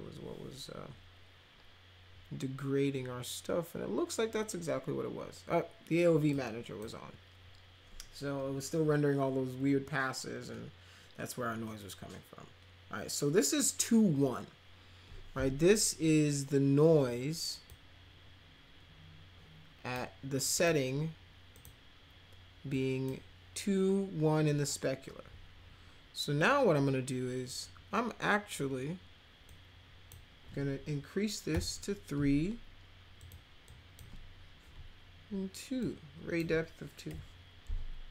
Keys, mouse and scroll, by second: 6.3-6.8 drag, 17.7-19.9 drag, 20.5 click, 21.5 click, 22.7 click, 29.4 click, 31.5 3, 33.2 click, 33.6 click, 35.8 click, 37.0 2.